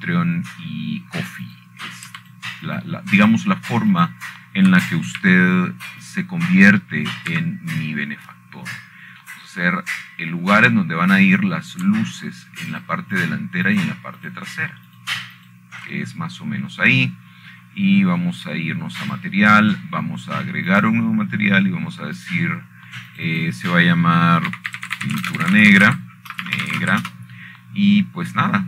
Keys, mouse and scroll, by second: 0.6-1.1 scroll down 6, 2.0-3.3 scroll up 8, 3.3-4.2 scroll down 1, 4.2 click, 4.9 shift+click, 5.4 shift+click, 5.9 shift+click, 6.7 shift+click, 7.5 click, 7.9 c, 8.8-10.1 drag, 10.1 Escape, 10.4-12.0 scroll down 1, 13.1 middle click, 13.4-14.4 scroll up 1, 14.4 scroll down 1, 15.4 shift+click, 15.9 shift+click, 16.4 shift+click, 16.9 shift+click, 17.6 shift+click, 18.1 shift+click, 20.1-21.1 scroll up 1, 21.8 click, 23.4 click, 24.9 click, 25.8 click, 26.0 click, 27.2-28.6 typing.